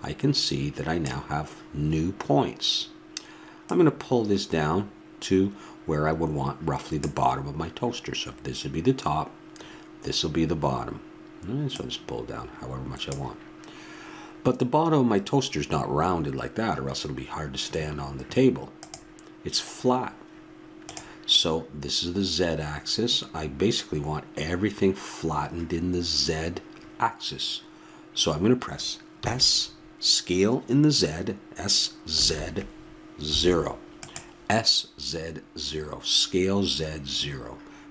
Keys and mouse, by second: 3.7-5.3 drag, 11.7-13.5 drag.